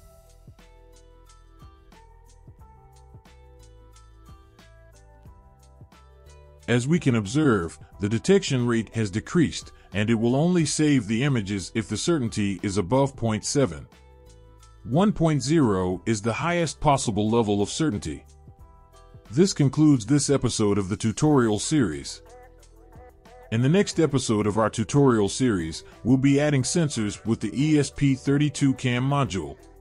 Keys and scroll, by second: 0.0 Up, 0.8 Return.